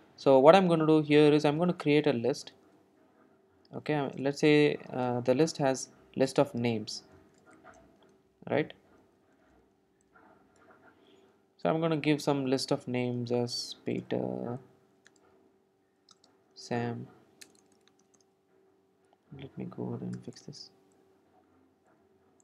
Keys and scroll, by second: 10.9 Return, 20.2 alt+Return, 20.3 alt+Return.